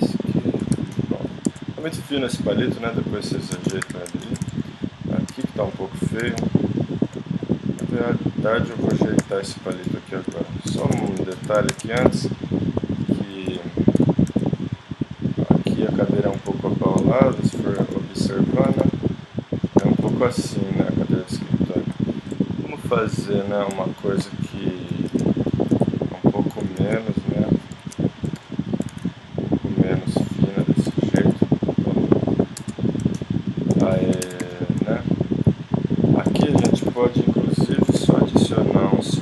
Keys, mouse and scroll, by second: 1.1 middle click, 1.5 Tab, 2.7 middle click, 3.1 middle click, 3.8 KP_1, 4.4 z, 5.3 Tab, 6.2 a, 7.8 s, 8.4 click, 8.9 g, 9.8 middle click, 11.0 z, 11.7 ctrl+Tab, 12.8-14.8 drag, 13.5 alt+o, 14.0 g, 15.9 click, 16.4 z, 17.8 z, 18.7 g, 20.3 middle click, 22.9 right click, 24.2 ctrl+KP_Add, 26.8 alt+s, 28.3 alt+o, 28.9 alt+s, 30.8 g, 32.6 Tab, 33.9 click, 34.3 Tab, 35.0-36.6 drag, 36.6 shift+s, 37.9 shift+a.